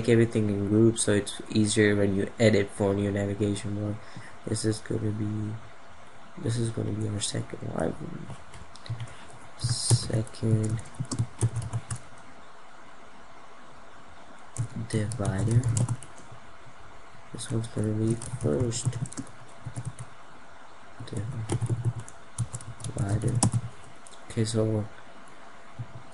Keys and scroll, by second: 23.1 F2.